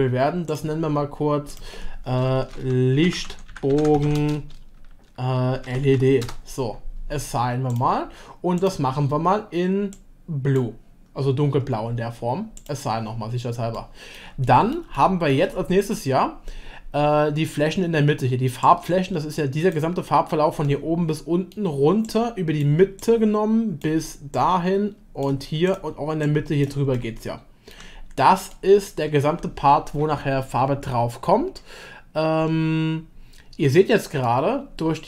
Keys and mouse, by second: 1.5-6.8 drag, 8.6 click, 12.6 click, 13.8-14.1 shift+middle drag, 14.4-14.7 middle drag, 14.9-15.3 shift+middle drag, 18.6-19.7 drag, 20.7 shift+middle click, 26.3 shift+click, 26.9 shift+middle click, 28.5 shift+middle click, 34.2-35.0 middle drag.